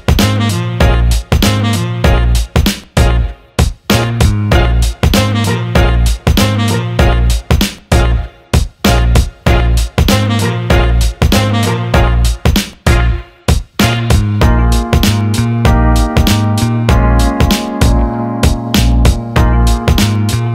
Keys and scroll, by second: 2.0 Escape.